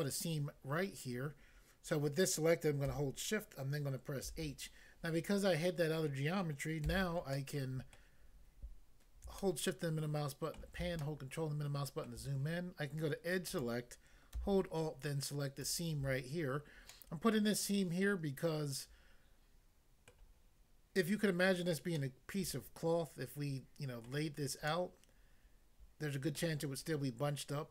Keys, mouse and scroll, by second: 4.2 h, 6.9 a, 7.4 middle click, 8.0 middle click, 9.4 shift+middle click, 13.5 click, 13.6 click, 15.6 alt+click, 16.9 middle click, 20.2 middle click, 22.0 middle click, 24.0 middle click, 24.7 middle click, 26.4 middle click.